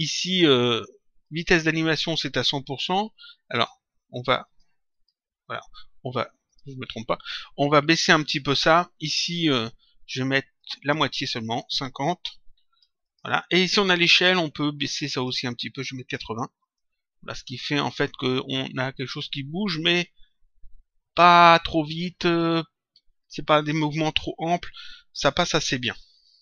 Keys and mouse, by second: 1.2 click, 3.5 click, 6.4 click, 10.5 click, 12.9 click, 14.8 click, 16.5 click.